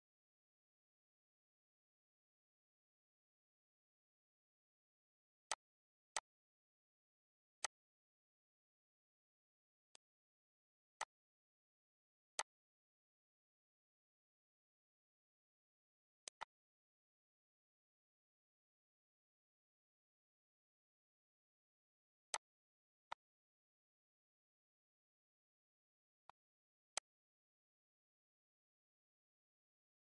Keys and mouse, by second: 5.4 click, 6.0 click, 7.5 click, 9.6 click, 10.7 click, 11.9 click, 15.9 click, 17.4 ctrl+s, 17.6 ctrl+s, 22.1 click, 22.9 click, 26.1 click, 26.8 click.